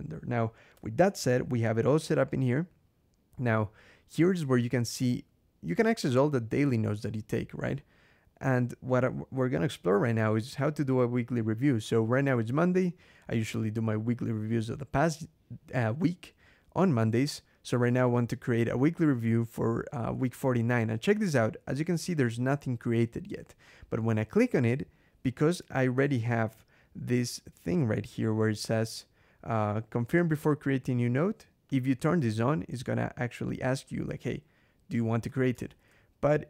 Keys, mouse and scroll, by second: 0.6 Escape, 25.8 ctrl+,, 26.7 scroll down 2, 27.5 click, 28.2 scroll down 2, 31.5 click, 32.1 Escape, 33.3 click, 35.1 Escape, 35.5 ctrl+,, 36.3 scroll down 2.